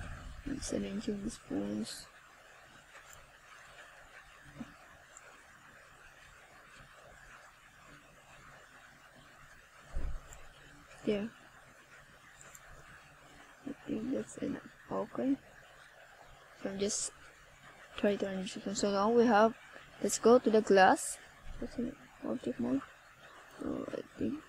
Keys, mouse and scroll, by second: 1.8 click, 7.8 click, 13.1 r, 14.9 click, 15.9 click.